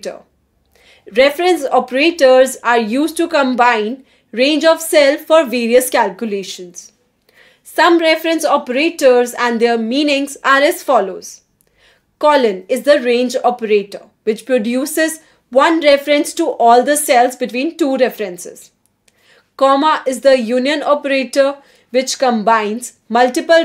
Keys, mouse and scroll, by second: 0.4 Return, 5.2-10.0 typing, 11.4 shift+(, 13.9-17.5 typing, 18.2 Return.